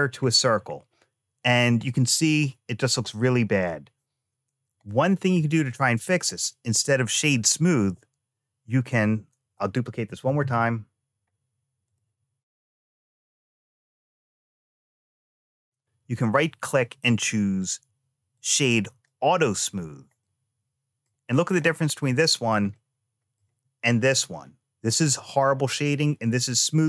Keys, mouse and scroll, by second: 0.0 scroll down 1, 0.6-1.7 scroll down 1, 1.7-2.8 middle drag, 3.4 click, 4.7 shift+middle click, 5.6 middle click, 9.9 shift+d, 12.6 click, 13.1 space, 13.3-14.3 middle drag, 15.0 shift+middle click, 16.0-19.0 right drag, 20.1 middle click, 21.2-21.7 scroll down 1, 22.6 shift+middle click.